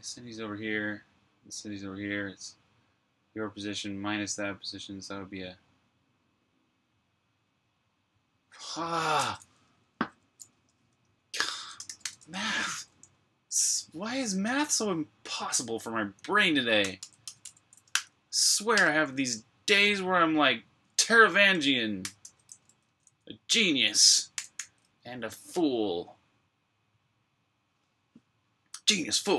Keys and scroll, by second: 0.0-0.6 typing, 9.8-13.8 typing, 16.4-18.5 typing, 21.8-22.9 typing, 23.9-24.7 typing.